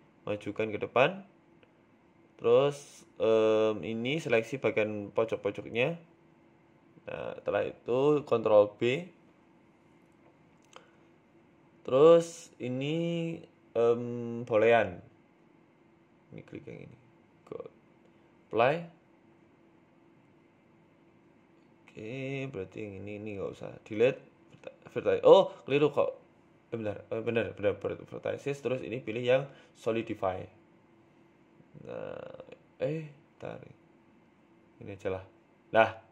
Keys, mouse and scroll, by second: 0.9 middle click, 1.6 g, 3.2 KP_1, 3.8 Tab, 4.2 click, 4.6 shift+click, 5.8 ctrl+z, 6.1 shift+click, 7.1 click, 7.4 click, 7.8 shift+click, 9.5 ctrl+b, 11.8 middle click, 13.6 Tab, 13.8 right click, 14.5 click, 17.8 click, 18.5 middle click, 19.6 click, 20.0 right click, 20.4 Delete, 20.8 middle click, 21.3 middle click, 21.9 middle click, 22.2-22.7 scroll up 3, 22.5 Tab, 22.7 middle click, 24.5 click, 25.0 right click, 25.6 Delete, 26.9 middle click, 27.2 Tab, 27.9 click, 32.1 shift+click, 33.2 middle click, 33.6-34.0 scroll down 3, 33.8 shift+middle click, 34.1 scroll up 2, 35.2 click, 35.2 scroll up 1.